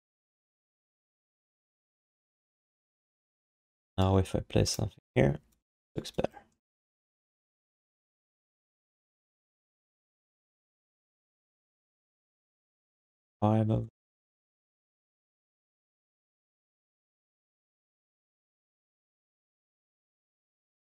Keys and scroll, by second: 1.0 alt+shift+d, 1.2 ctrl+s.